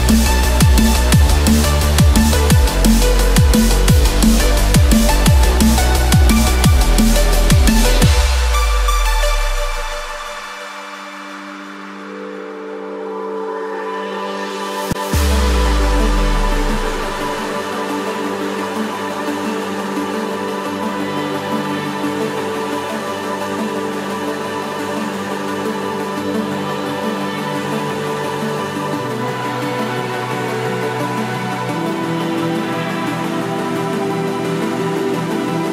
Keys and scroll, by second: 0.9 ctrl+z, 13.6 ctrl+=, 18.1 ctrl+-, 19.2 ctrl+z, 21.7 ctrl+-, 24.2 ctrl+z, 34.6 ctrl+z.